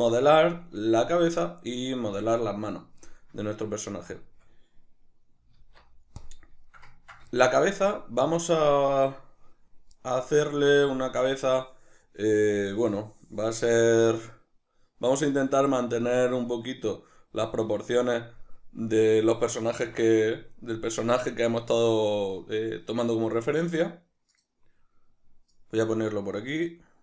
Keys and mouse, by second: 5.6 alt+q.